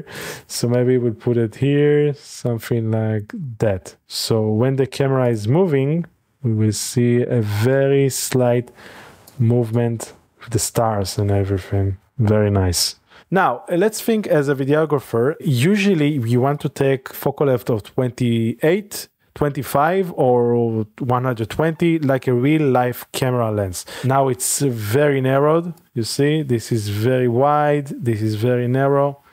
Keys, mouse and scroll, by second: 0.3 click, 0.4 typing, 3.4 click, 5.3 click, 5.8 typing, 8.4 g, 8.5 x, 8.8 click, 9.3-10.4 drag, 12.5 click, 13.2 ctrl+s, 16.6 click, 24.3-25.8 middle drag, 25.8-29.3 drag.